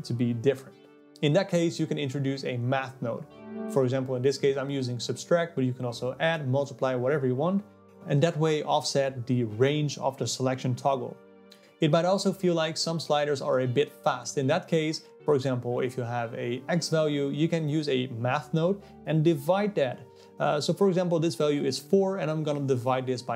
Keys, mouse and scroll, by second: 1.6 shift+a, 4.7-6.1 drag, 6.9 click, 7.8-9.3 drag, 9.4 Tab, 12.0-14.8 drag, 15.9 click, 18.3 click, 19.3-23.3 drag.